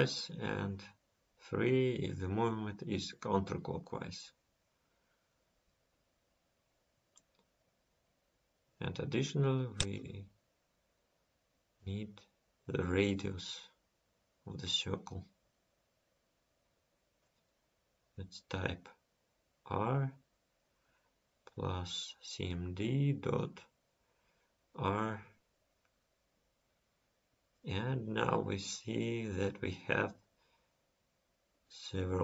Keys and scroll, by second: 5.0 ctrl+s.